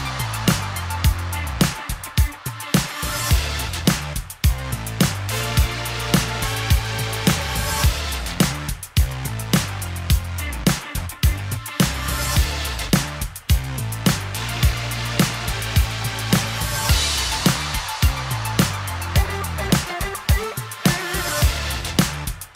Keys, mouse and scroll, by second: 1.9 click, 2.4-3.6 typing, 3.6 click, 4.1 click, 4.8 Tab, 6.2 click, 7.4 middle click, 8.8-9.5 drag, 9.8-10.3 drag, 10.1-10.8 typing, 11.3 click, 12.2 click, 13.1 click, 17.3 click, 17.4-22.5 ctrl+drag.